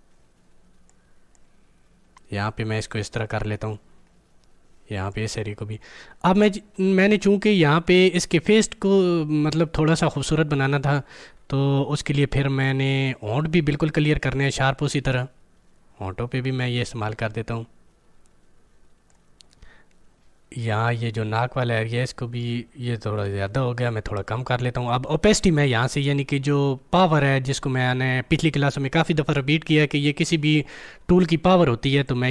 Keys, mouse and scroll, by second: 5.4 scroll up 1, 11.9 scroll up 1, 12.1-14.3 alt+right drag, 14.3-23.3 drag, 23.3 ctrl+z, 25.3 click, 32.0-32.3 drag.